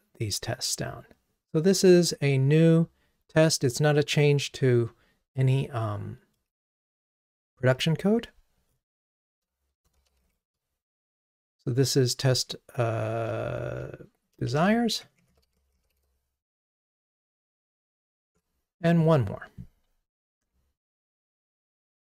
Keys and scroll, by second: 18.4 ctrl+Tab.